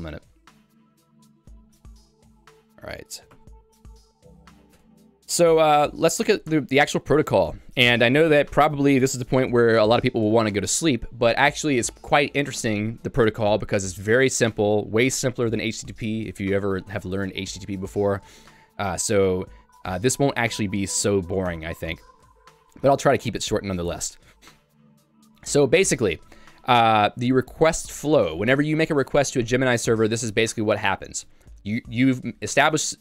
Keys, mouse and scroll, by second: 0.1 j, 3.5 q, 5.1 Escape, 5.7 j, 6.2 Tab, 6.8 j, 8.7 j, 18.2 k, 21.5 Tab, 22.3 j, 23.0 k, 23.7 j.